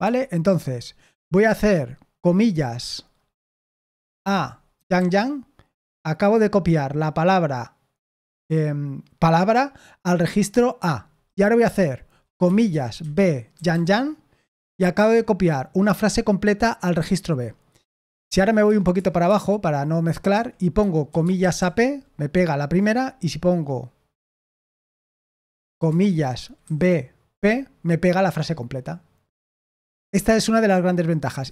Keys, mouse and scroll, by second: 0.0-0.7 typing, 4.4-5.4 typing, 11.6-13.6 typing, 18.2 o, 18.6 Return, 18.9 Return, 19.2 Return, 20.3 Escape, 20.8-22.0 typing, 24.3 o, 25.7-27.8 typing.